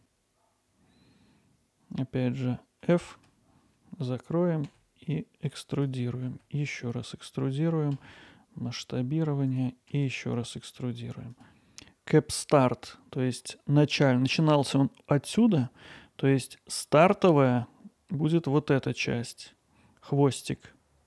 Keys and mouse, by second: 0.0 2, 2.3 f, 4.2 click, 4.6 e, 4.9 click, 5.7 s, 6.9 click, 7.2 e, 9.2 s, 11.3 e.